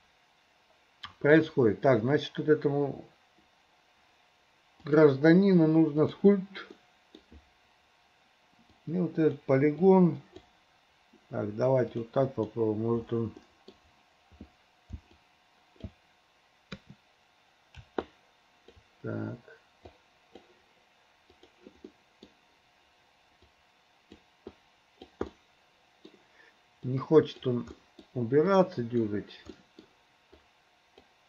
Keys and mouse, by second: 1.4 click, 4.9-6.4 drag, 6.8 click, 6.8 middle click, 8.9 click, 9.9 click, 12.0 click, 12.3 click, 13.5 middle click, 15.2 alt+click, 18.1 ctrl+click, 20.0 click, 21.4 click, 22.0 middle click, 23.6 click, 24.6 click, 25.4 middle click, 26.9 click, 27.8 middle click, 28.5 click, 29.6 middle click, 30.5 click.